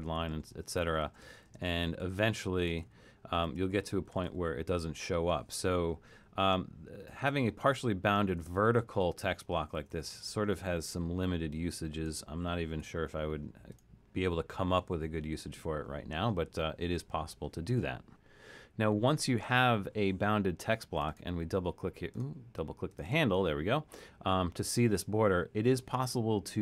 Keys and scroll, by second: 0.0-4.8 typing, 6.0-10.1 typing, 12.8 BackSpace.